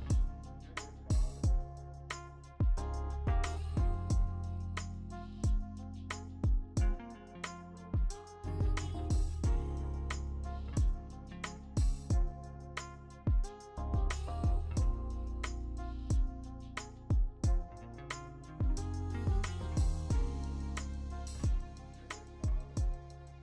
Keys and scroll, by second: 0.3 b, 2.3 ctrl+z, 2.3 0, 3.3 3, 3.8 ctrl+z, 6.4 ctrl+z, 13.0 ctrl+z, 13.5 p, 15.5 ctrl+z, 16.3 ctrl+z, 19.8 Return, 20.5 Escape, 20.9 Escape, 21.3 ctrl+z, 23.2 ctrl+z, 23.2 1.